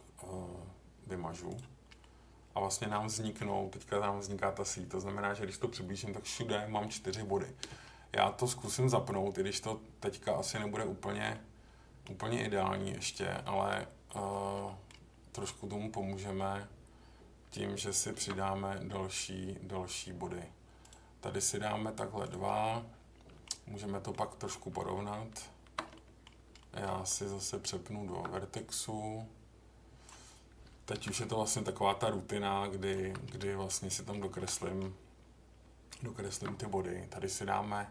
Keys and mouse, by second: 2.0 middle click, 8.6 click, 9.1-10.5 middle drag, 11.3 middle click, 13.0 click, 14.6 middle click, 18.1 ctrl+r, 22.2 click, 22.5 middle click, 23.8 middle click, 25.9 middle click, 26.6 middle click, 27.5 Tab, 28.5-30.1 drag, 30.9 j, 31.7-32.9 drag, 33.0 j, 33.3 middle click, 33.8 middle click, 34.4 click, 34.6 middle click, 36.2 ctrl+r.